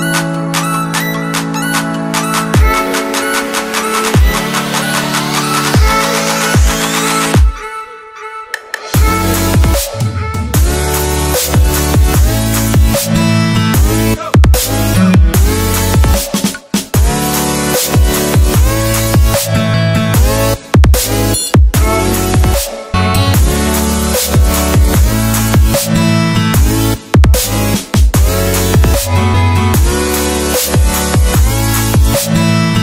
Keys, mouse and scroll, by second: 1.4 scroll down 1, 1.6 click, 4.6 click, 5.2 scroll up 1, 5.7 click, 7.6 alt+Tab, 8.1 scroll up 1, 8.5 click, 8.8-11.8 typing, 12.1 Return, 14.3 click, 17.4 click, 18.2 right click, 19.2 click, 19.5 alt+Tab, 20.5 click, 21.2 v, 22.9 click, 25.0 click, 25.3 Delete, 26.0 click, 30.6 click, 32.1 Return.